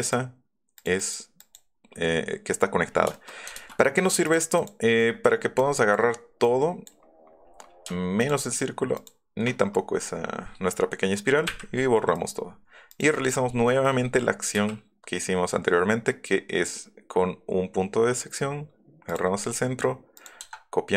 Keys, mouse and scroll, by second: 0.8 click, 1.0 click, 1.4 click, 4.2 click, 4.6 click, 5.3 scroll down 1, 5.6 click, 6.4 middle click, 7.5 middle click, 8.2 shift+click, 8.9 shift+click, 9.6-9.9 scroll down 2, 12.1 middle click, 12.9 middle click, 13.2 click, 13.4 middle click, 13.7 middle click, 13.8 middle click, 14.4 middle click, 14.6 q, 19.1 click, 20.1 click.